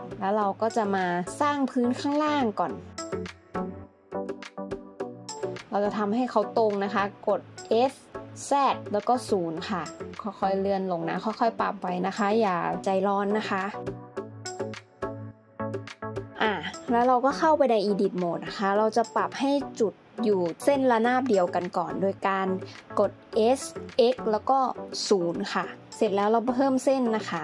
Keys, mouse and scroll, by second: 3.1 scroll up 1, 4.0 Tab, 5.5 alt+z, 8.4 s, 8.9 0, 12.7 Tab, 13.2 alt+z, 13.5 middle click, 17.2 Tab, 18.6 alt+z, 20.3 s, 20.9 x, 21.3 0, 24.4 s, 24.6 x, 24.9 0, 26.1 ctrl+r.